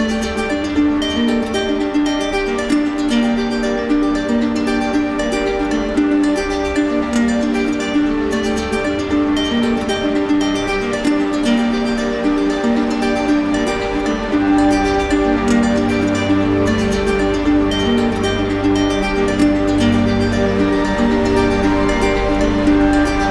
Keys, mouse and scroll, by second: 15.1 click, 16.8-17.9 drag, 17.9-19.0 drag, 22.3 click.